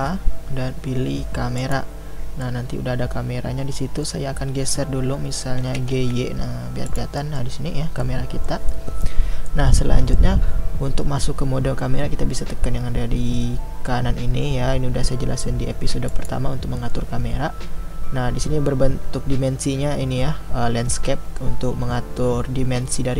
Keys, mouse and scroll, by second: 1.7 shift+a, 2.5-5.7 middle drag, 5.7 g, 7.2-16.1 middle drag, 16.1 click.